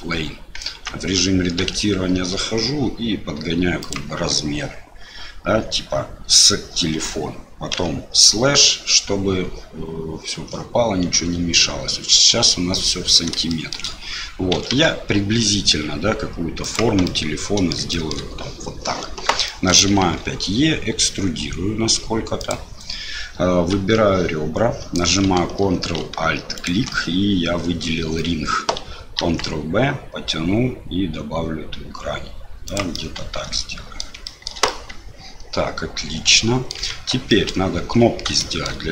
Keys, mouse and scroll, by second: 0.6 Tab, 1.7 s, 13.5 shift+click, 14.5 s, 17.1 click, 17.9 shift+middle click, 19.5 shift+middle click, 20.0 e, 23.7 2, 26.5 ctrl+alt+click, 29.2 ctrl+b, 32.9-34.0 drag, 34.2 shift+click, 34.8-36.7 drag, 36.8 Tab, 37.3 click, 38.4 shift+click.